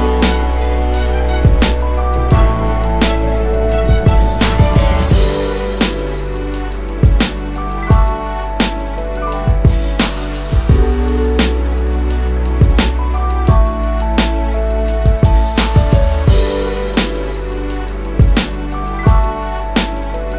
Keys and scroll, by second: 12.3-12.7 typing, 13.7 ctrl+-, 14.1 ctrl+-, 14.8-16.7 space, 17.2 w.